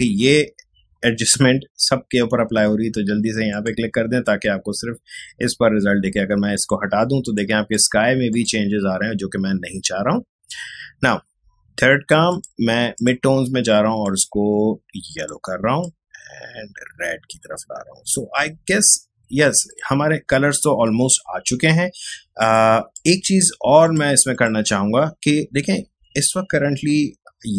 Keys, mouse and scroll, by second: 3.5 click, 6.5 click, 12.3-21.9 drag, 22.4 click.